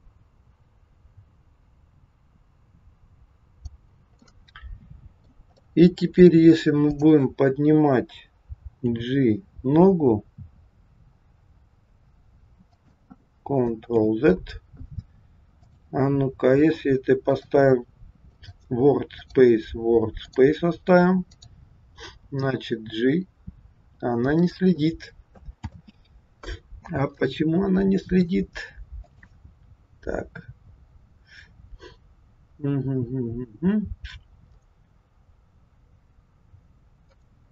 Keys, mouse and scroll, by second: 4.3 middle click, 5.5 middle click, 6.9 click, 8.8 g, 14.0 ctrl+z, 15.7 click, 17.3 click, 19.2 click, 21.3 click, 22.5 g, 25.8 ctrl+z, 27.3 middle click, 29.0 click, 37.1 click.